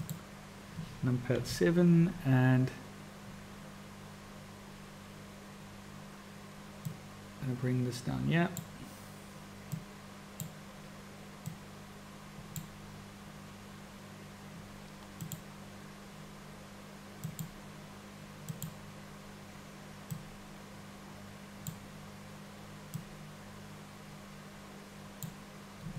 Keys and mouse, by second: 1.3 KP_7, 6.8-8.8 drag, 9.7 click, 11.6-12.7 drag, 15.1 click, 18.4 click, 20.2-21.8 drag, 23.1-25.3 drag.